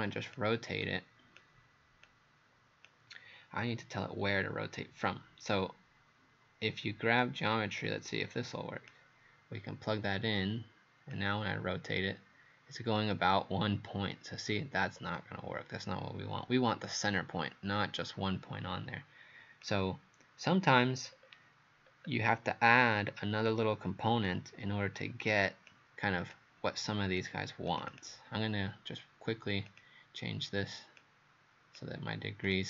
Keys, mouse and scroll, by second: 21.1-21.4 scroll down 2, 21.9 scroll down 1, 22.7 click, 27.9 click, 29.7 click.